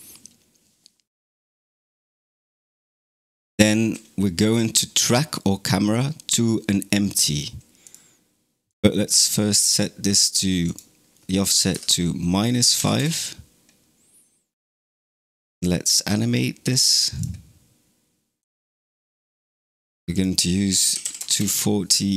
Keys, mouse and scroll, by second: 7.7 click, 8.5 click, 9.5 click, 10.5-13.6 drag, 16.6-22.1 drag.